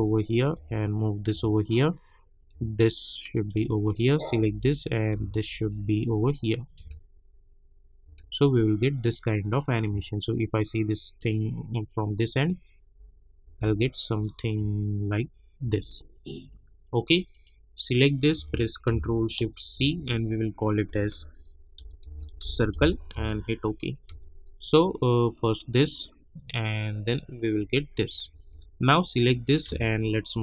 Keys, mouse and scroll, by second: 0.4-3.9 drag, 4.2 drag, 6.8 space, 9.1 click, 9.8 space, 13.4 space, 14.2 click, 14.5 space, 16.5 click, 19.7 ctrl+shift+c, 21.5-24.0 typing, 27.5 space, 29.5-30.4 drag.